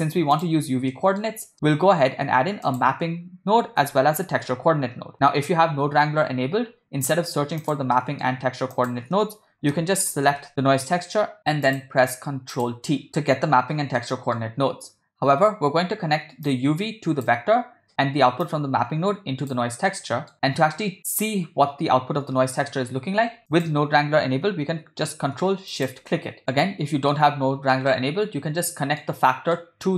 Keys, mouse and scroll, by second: 0.9 ctrl+middle click, 1.5 scroll up 1, 1.5 middle drag, 2.5 shift+a, 4.3 p, 6.6 BackSpace, 8.0 middle click, 8.7 shift+a, 11.4 o, 13.1 ctrl+t, 13.1 ctrl+z, 14.0 middle click, 16.5-17.4 drag, 18.5 click, 19.9 middle click, 23.5 click, 25.9 ctrl+shift+click, 26.4 middle click, 27.9-29.1 middle drag, 29.6 middle click.